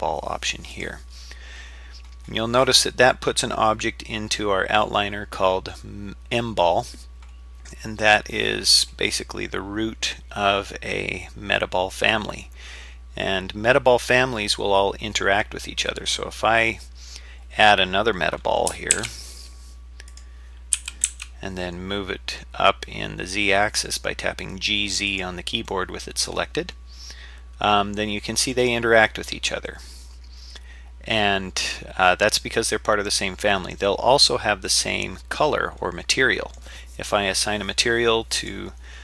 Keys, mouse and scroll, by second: 18.9 shift+a, 20.8 g, 25.7-28.5 middle drag, 29.7-33.7 middle drag, 34.7-36.6 middle drag, 38.4-38.7 drag.